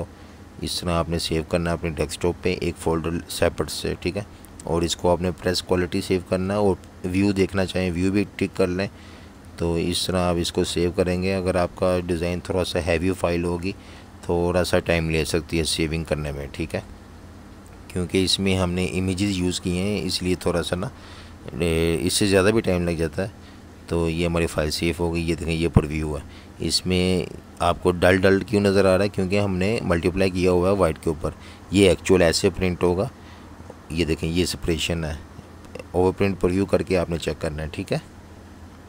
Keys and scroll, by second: 0.0-0.8 typing, 2.2 Return, 34.7 super+s.